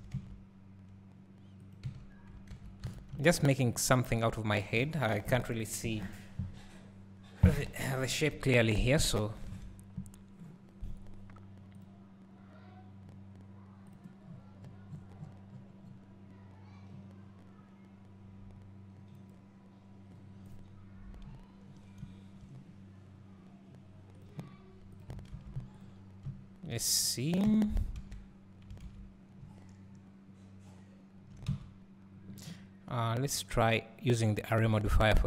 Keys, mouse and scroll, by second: 2.9 alt+a, 25.9 click, 28.0 alt+a, 31.6 Tab, 35.0-35.2 drag.